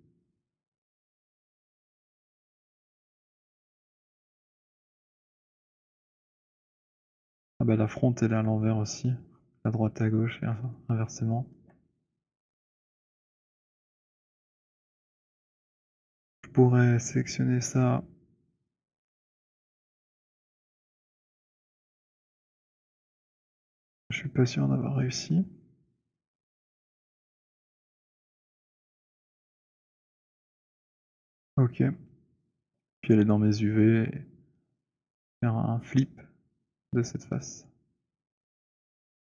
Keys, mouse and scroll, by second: 1.9 click, 2.6-4.2 scroll, 5.4 alt+middle click, 5.9 alt+middle click, 6.2 alt+middle click, 6.8 alt+middle click, 7.1 alt+middle click, 7.4 middle click, 7.7 middle click, 8.4 alt+middle click, 10.0 middle click, 10.2 middle click, 10.7-11.2 scroll, 11.6 alt+middle click, 13.7-14.8 scroll, 14.8 scroll, 14.9 alt+middle click, 15.7 w, 16.2 click, 19.3 click, 20.5 click, 25.9 click, 27.2 alt+click, 27.9 click, 29.4 alt+scroll, 30.0 alt+middle click, 30.6 click, 33.1 ctrl+u, 37.7 click, 38.5 click.